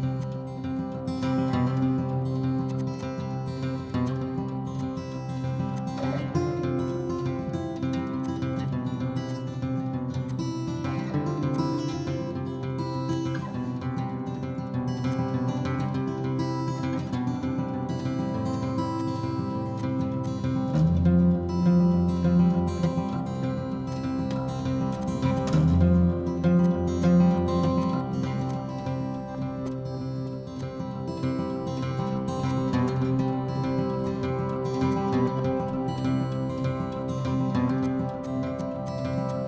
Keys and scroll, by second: 2.4 Escape, 3.5 s, 10.4 m, 13.3 Escape, 16.5 h.